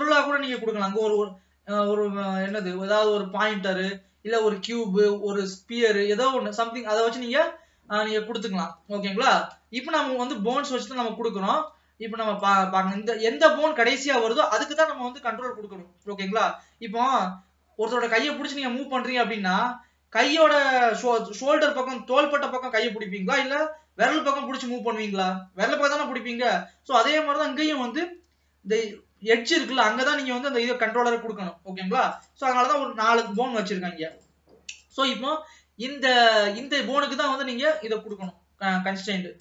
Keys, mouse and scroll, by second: 0.5 click, 1.0 click, 2.5 click, 7.1-10.3 middle drag, 10.9 ctrl+s, 11.0 middle click, 11.8 ctrl+s, 12.5 click, 32.2 click, 33.3 click, 34.2 click, 34.8 click, 38.2 click.